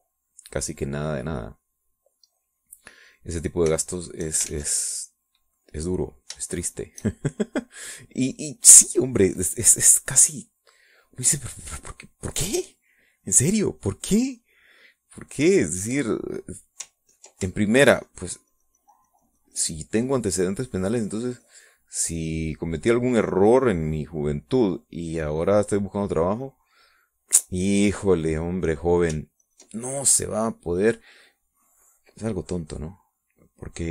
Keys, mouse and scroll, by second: 2.7-4.7 drag, 4.8 shift+click, 5.5 ctrl+shift+z, 6.1-9.1 ctrl+drag, 9.5 middle click, 11.4 middle click, 12.2-13.7 middle drag, 13.7 middle click, 14.1 click, 14.7-17.7 middle drag, 18.2 ctrl+click, 18.5-27.4 ctrl+shift+drag, 27.7 middle click, 29.0 middle click, 29.4 middle click, 30.5 ctrl+click, 31.1-33.9 ctrl+drag.